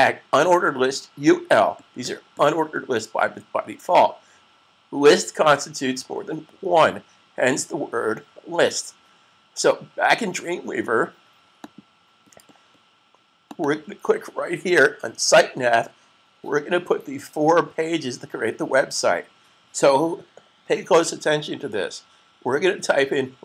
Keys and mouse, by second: 11.5 click, 13.6 double click.